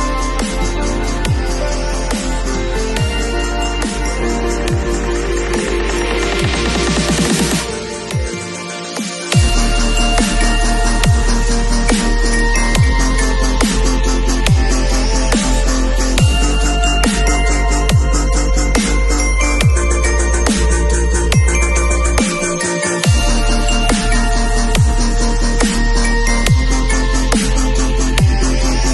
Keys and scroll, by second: 5.8 super+z, 6.9 super+x.